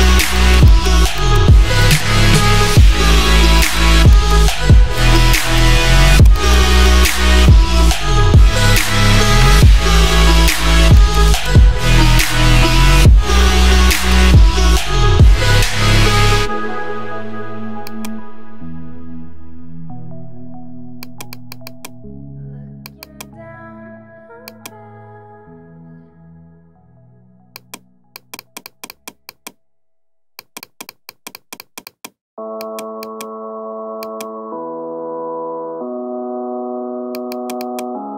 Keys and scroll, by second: 11.6 ], 12.9 [, 23.8 [.